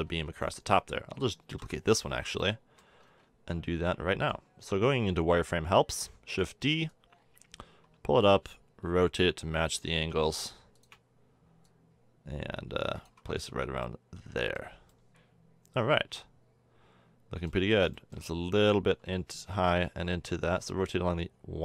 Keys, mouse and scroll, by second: 0.0 a, 1.5 l, 2.5 middle click, 3.4 z, 6.1 shift+d, 7.0-8.6 drag, 8.8 r, 11.6 click, 13.2 z, 13.4 Tab, 13.8 click, 15.0-15.6 middle drag, 17.1-18.2 middle drag, 19.5 Tab, 20.6 r.